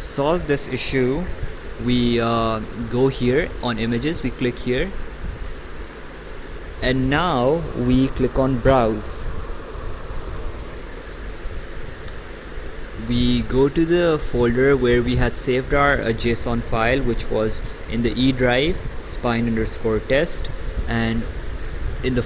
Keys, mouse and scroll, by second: 5.8 click, 10.0 click, 14.8 click, 19.5 click.